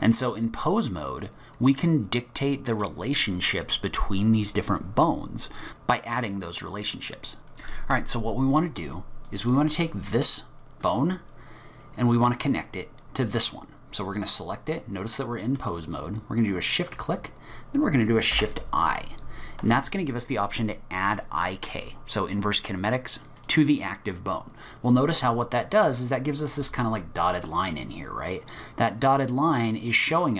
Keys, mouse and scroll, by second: 9.3 click, 14.1 click, 16.4 shift+click, 18.3 shift+i, 26.6 g.